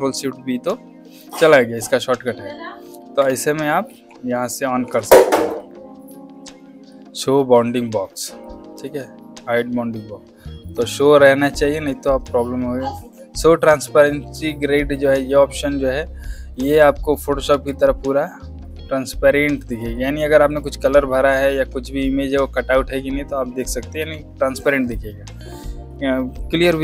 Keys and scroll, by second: 3.8 shift+b, 17.4 z, 21.2 space, 23.9 v.